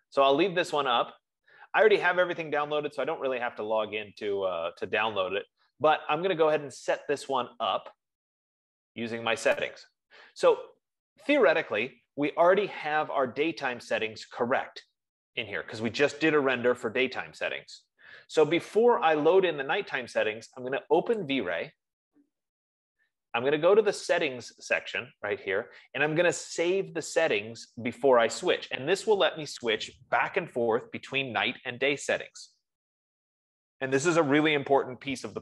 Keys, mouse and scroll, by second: 0.2-0.6 scroll, 0.9-1.8 scroll, 9.6 F15, 10.5 click, 14.7 click, 21.8 click, 24.7 click.